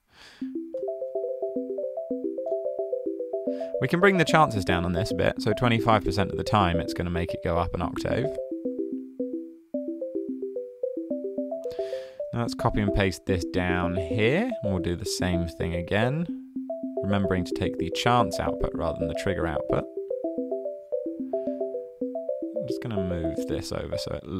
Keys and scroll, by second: 4.0-4.5 typing, 5.6-6.4 typing, 12.3 super+c, 14.1 super+v.